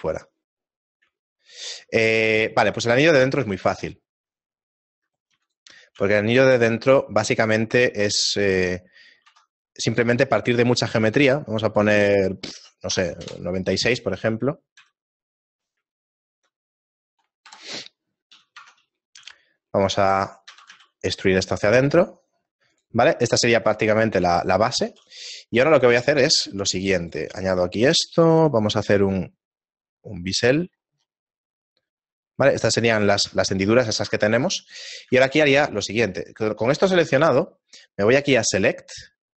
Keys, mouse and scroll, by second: 5.2 right click, 5.3 x, 6.1 shift+a, 8.2-8.7 scroll up 3, 9.3 F6, 14.8 s, 16.0 shift+middle click, 17.5 KP_7, 18.6 Tab, 19.2 s, 20.5 e, 23.7-25.1 scroll up 2, 25.1 ctrl+r, 25.1 middle click, 25.1-25.5 scroll up 1, 28.3 ctrl+b, 34.4 ctrl+Tab, 36.5 middle click.